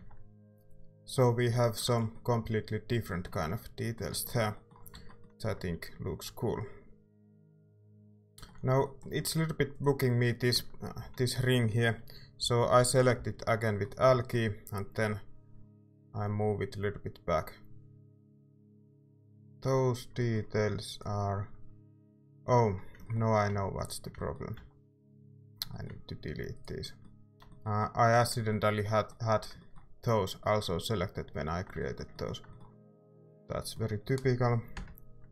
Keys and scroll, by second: 1.5 a, 1.8 ctrl+s, 4.9 Tab, 10.5 Tab, 11.0 a, 12.1-14.5 typing, 18.1 a, 24.5 a, 34.7 ctrl+KP_Add.